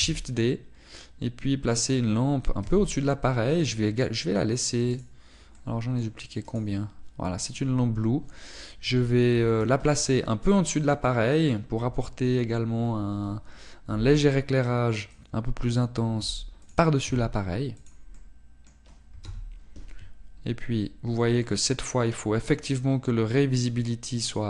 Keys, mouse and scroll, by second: 1.1 shift+d, 2.8 click, 3.7 r, 4.7 click, 6.0 right click, 6.6 middle click, 7.5 right click, 8.5 right click, 11.1 middle click, 14.9 g, 16.3 click, 17.3 g, 17.9 click, 18.2 r, 19.0 click, 19.3 middle click, 20.4 KP_0, 21.5 scroll up 1.